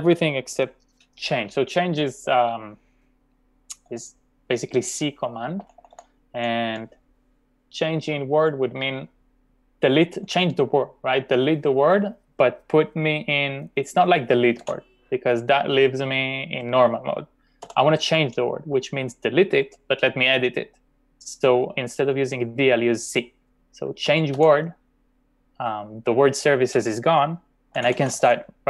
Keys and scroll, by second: 5.6 typing, 14.4-15.1 typing, 17.7 u, 19.8 typing, 24.0-24.4 typing, 27.5-28.3 typing.